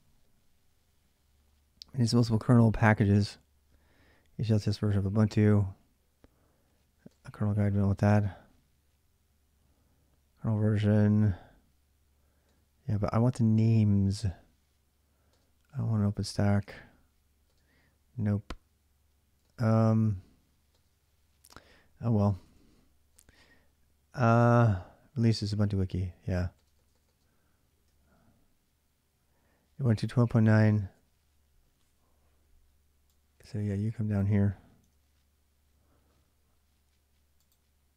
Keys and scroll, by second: 4.3 space, 6.8 space, 12.2 space, 15.1 space, 16.3 space, 17.2 space, 19.2 space, 20.5 space, 21.3 h, 22.9 space, 25.1 l, 26.3 space, 26.5 space, 26.8 space, 27.6 k, 30.7 ,.